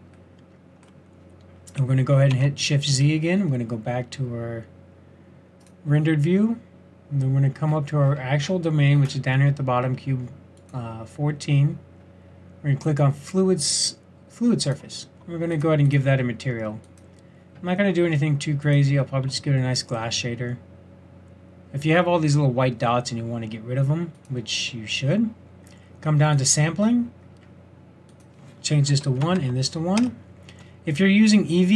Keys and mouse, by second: 2.3 shift+z, 10.6-12.4 drag, 12.9-18.8 drag, 19.6 middle click, 20.0-22.7 middle drag, 24.1-30.0 drag.